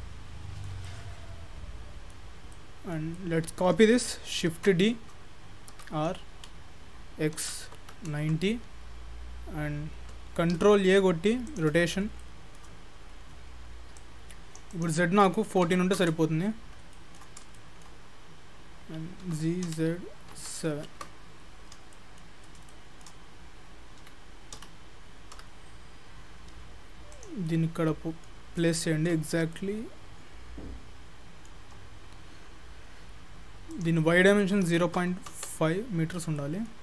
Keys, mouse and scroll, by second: 0.0 middle click, 0.9 middle click, 2.4 scroll down 2, 2.6 middle click, 3.2 middle click, 4.6 shift+d, 10.6 ctrl+a, 11.9 scroll up 1, 12.0 scroll down 1, 12.1 scroll down 3, 12.2 shift+middle click, 14.0 click, 14.7 click, 16.6-16.9 scroll down 5, 16.9 shift+middle click, 17.4 scroll up 1, 17.6 shift+middle click, 19.2 g, 21.7 scroll up 2, 22.0 shift+middle click, 24.0 g, 27.5 middle click, 28.5-28.8 scroll up 4, 28.8 shift+middle click, 29.3 scroll up 2, 29.6 shift+middle click, 32.0-32.4 scroll down 1, 33.8 click, 36.2 scroll down 2, 36.4 middle click.